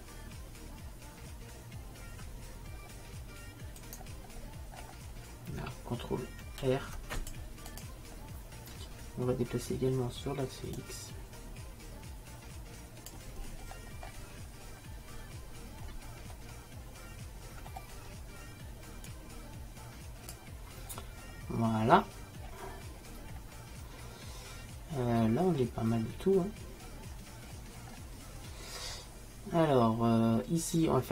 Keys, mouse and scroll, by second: 4.1-5.5 middle drag, 5.5-7.3 drag, 6.7 ctrl+r, 10.9-12.8 drag, 13.7-16.3 middle drag, 16.6-18.4 middle drag, 19.2-21.0 drag, 21.0-23.6 middle drag, 25.3-28.0 middle drag, 28.1-31.0 middle drag.